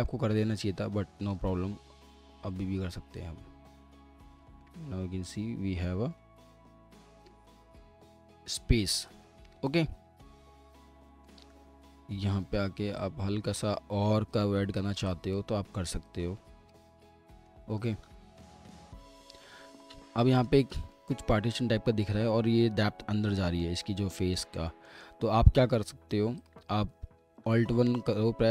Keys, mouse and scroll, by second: 0.8 alt+click, 4.6 alt+middle click, 9.5 alt+middle click, 11.1 alt+middle click, 11.4 alt+w, 12.5 typing, 17.2 middle click, 17.7 alt+w, 18.5 alt+middle click, 18.9 scroll down 1, 19.2 alt+middle click, 27.3 alt+1.